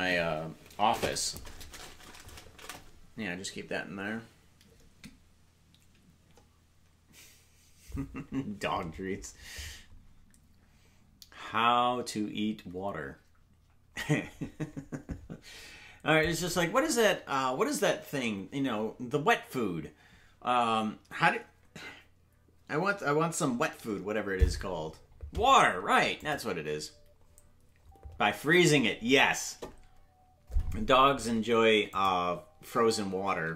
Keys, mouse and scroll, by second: 16.2 click, 24.5-25.3 scroll up 1, 32.0 click, 32.6 space.